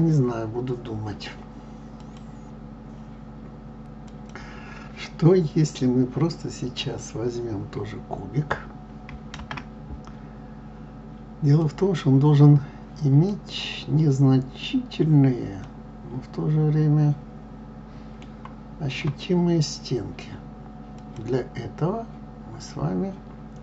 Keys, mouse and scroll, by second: 1.0-9.2 scroll down 1, 15.6-21.0 middle drag, 21.0 click.